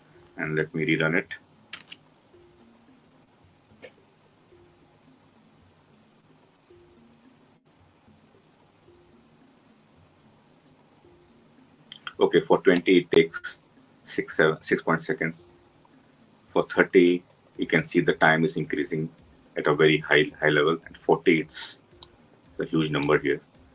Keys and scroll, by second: 1.5 ctrl+shift+F10.